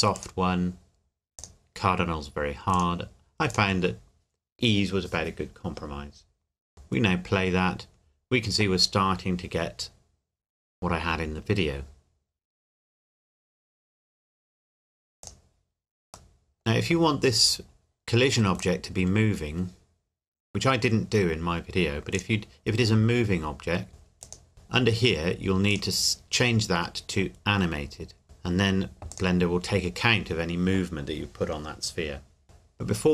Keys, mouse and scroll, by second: 6.7 click, 15.2 click, 16.3 middle click, 17.0-17.5 scroll up 1, 17.5 scroll down 1, 18.6 click, 22.1 click, 25.7 click, 29.1 click, 33.0-33.1 scroll up 2.